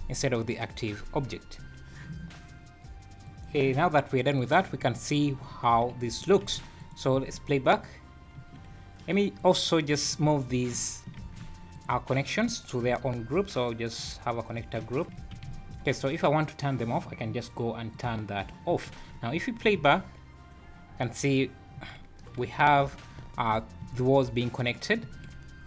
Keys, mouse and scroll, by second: 4.4 click, 5.3 scroll down 5, 6.4 alt+h, 6.8 click, 7.1 space, 8.4 Escape, 9.3 click, 10.0 click, 11.1 shift+g, 12.8 m, 15.0 click, 15.2 alt+a, 18.0 click, 19.1 scroll up 3, 19.7 space, 21.8 Escape, 22.6 `, 23.2 `, 23.8 space, 25.0 Escape.